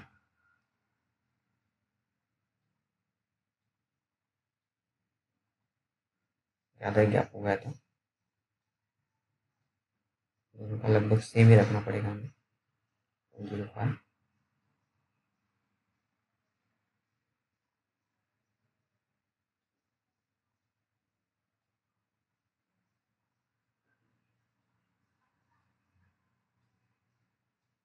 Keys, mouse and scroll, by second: 1.7 right click, 2.3 click, 2.9-3.4 typing, 5.1 click, 14.4-16.3 scroll down 1, 16.9 2, 18.7 click, 19.6-20.1 scroll up 1, 20.8 click, 22.8-26.1 scroll down 1.